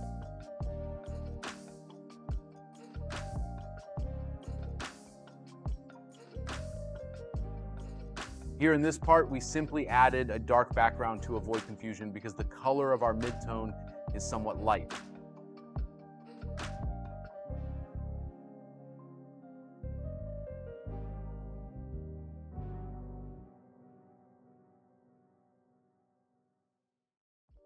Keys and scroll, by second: 4.2 space, 16.4 scroll, 17.1 space.